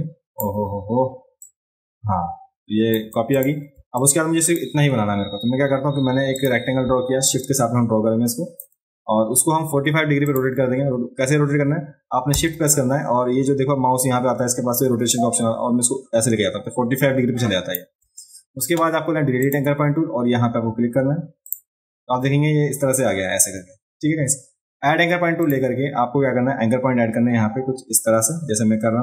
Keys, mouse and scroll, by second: 1.4-3.0 alt+drag, 3.3 click, 3.7 space, 4.0 click, 6.3 click, 7.3-8.6 shift+drag, 10.3 click, 15.1-17.7 shift+drag, 19.4 click, 21.5 click, 25.4 click.